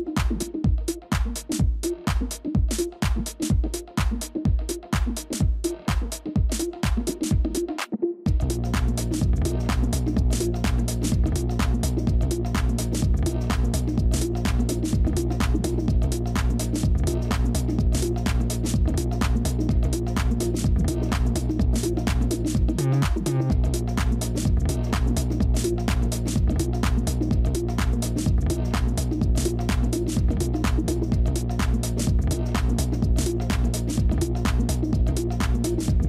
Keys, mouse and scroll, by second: 3.7 shift+click, 4.6 shift+click, 4.7 ctrl+f, 6.1 ctrl+z, 6.7 ctrl+g, 7.6 ctrl+-, 7.9 ctrl+-, 8.1 ctrl+-, 8.7 space, 11.3 scroll down 1, 11.3 s, 15.5 space, 30.2 space.